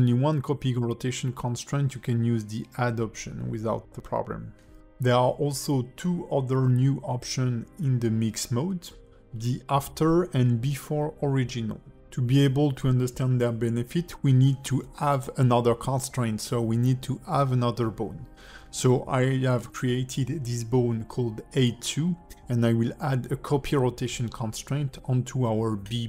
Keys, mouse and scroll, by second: 0.0 click, 0.3 click, 0.7 r, 3.0 click, 3.8 shift+click, 4.3 alt+r, 4.8 click, 5.8 click, 6.2 r, 7.7 click, 8.8 shift+click, 9.3 ctrl+shift+c, 11.4 click, 13.0 click, 23.8 click, 24.3 r.